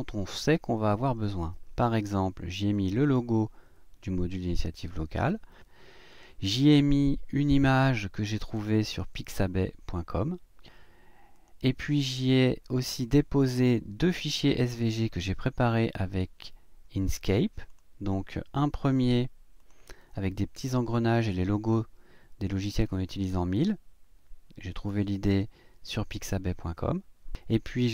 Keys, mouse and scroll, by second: 2.7 click, 6.1 click, 8.3 click, 11.3 click, 12.8 click, 17.7 click, 19.6 click.